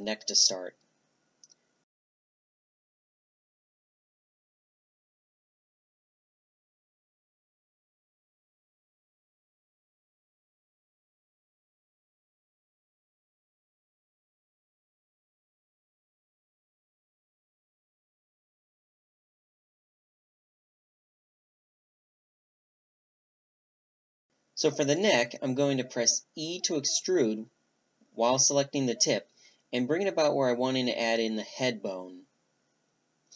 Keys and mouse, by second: 0.0-3.6 drag, 4.4-5.0 drag, 5.4-6.4 drag, 8.3-11.4 drag, 9.2-11.4 middle drag, 11.6-13.7 drag, 13.7-16.1 right drag, 16.1 click, 16.6 click, 17.0 right click, 17.5 click, 18.1 z, 19.8 click, 22.5-24.1 middle drag, 23.8-27.8 drag, 27.8 g, 31.0 e.